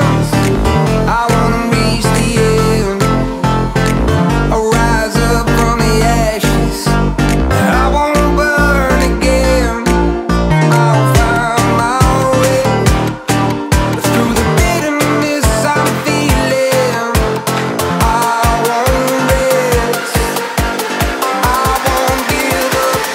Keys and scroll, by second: 3.3 ctrl+-, 3.6 ctrl+-, 4.4 ctrl+j, 5.6 ctrl+shift+a.